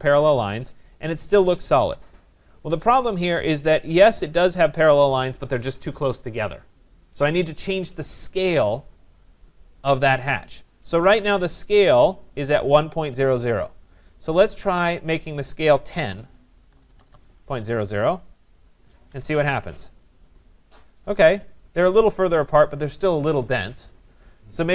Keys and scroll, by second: 19.2 Tab.